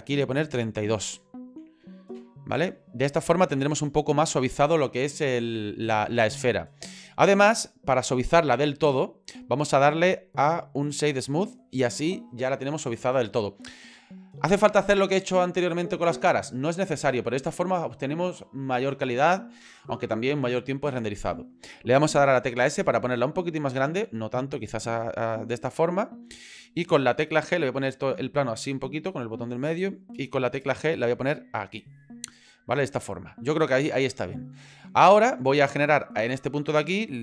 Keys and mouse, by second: 0.4-3.3 drag, 8.0-11.2 drag, 22.6 s, 23.9 s, 25.7 middle click, 27.4-29.7 middle drag, 30.7 g, 32.6-34.3 middle drag.